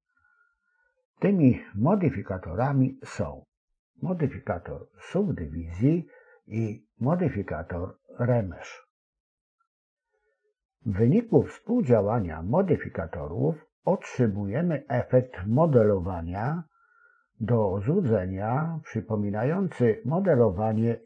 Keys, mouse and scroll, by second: 4.0 click, 8.1 click, 10.6 click, 14.7 s.